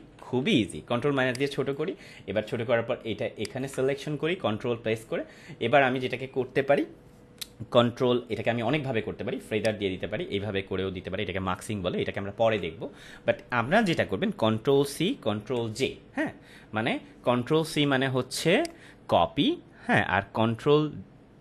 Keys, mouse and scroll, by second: 1.0 space, 1.2 click, 1.5-1.8 space, 3.4 ctrl+click, 9.6 click, 12.4 ctrl+z, 18.6 click.